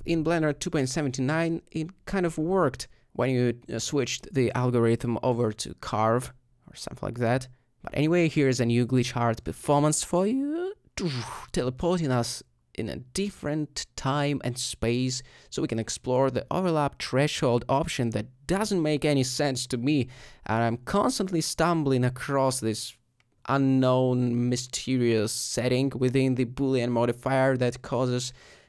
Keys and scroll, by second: 1.0 typing, 6.9 s, 10.5 s, 15.1 ;, 16.0 ;, 18.0 g, 21.6 ctrl+alt+g, 25.6 s, 26.6 typing, 28.0 alt+z.